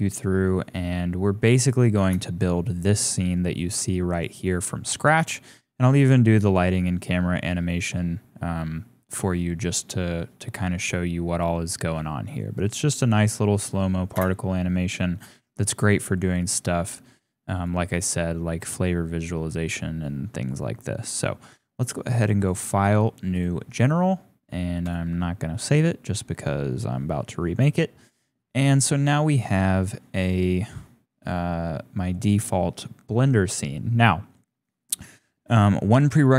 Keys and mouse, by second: 1.6 click, 2.0 space, 14.2 space, 15.2 drag, 16.8-17.3 drag, 22.4-25.2 drag, 27.2 click, 28.8-29.8 drag, 31.1 click, 31.8 click.